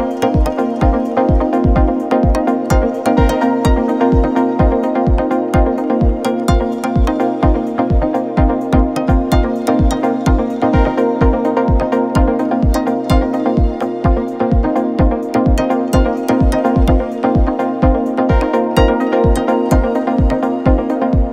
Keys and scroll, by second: 3.4 ctrl+-, 4.6 ctrl+=, 5.2 =, 7.0 ctrl+0, 8.1 =, 8.5 -.